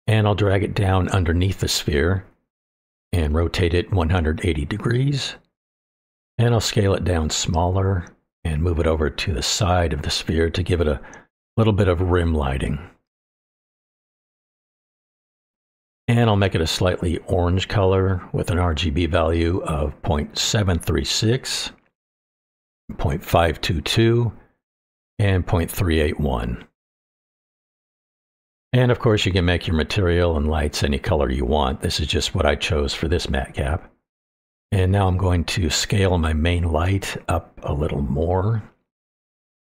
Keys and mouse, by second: 1.7 click, 2.4-4.8 drag, 5.8 middle drag, 6.6 click, 6.8 middle click, 7.9 click, 9.3 click, 9.6-10.1 middle drag, 10.7-12.6 drag, 17.9 click, 23.2 KP_2, 29.5-30.8 drag, 36.3-36.7 middle drag, 37.2 click, 37.7 click, 38.2 middle drag, 39.3 click.